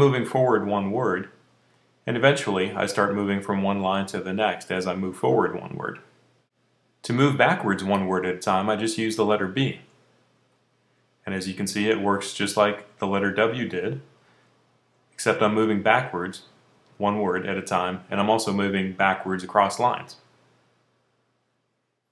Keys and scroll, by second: 0.0-4.3 typing, 9.6-16.7 typing, 19.6 typing.